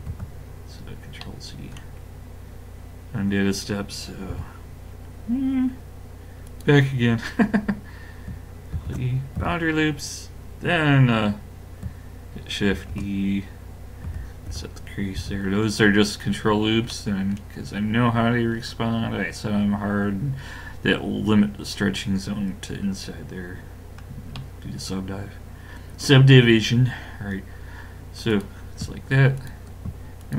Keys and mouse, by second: 1.2 middle click, 4.3 i, 8.7 ctrl+e, 12.7 shift+e, 15.2 a, 21.6-22.9 middle drag, 26.4-28.2 middle drag, 28.3-30.3 drag.